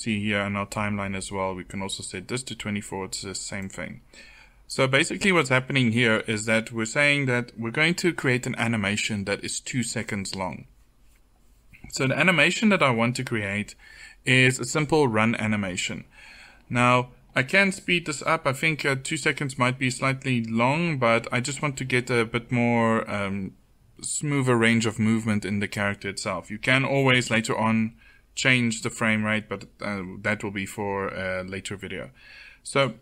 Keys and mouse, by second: 3.6-7.7 drag.